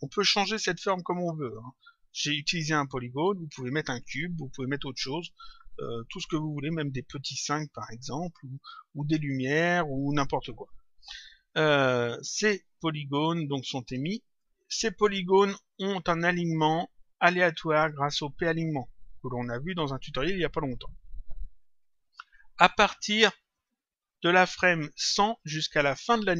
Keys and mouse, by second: 16.1 click, 23.5 click, 24.9 click, 26.0 click.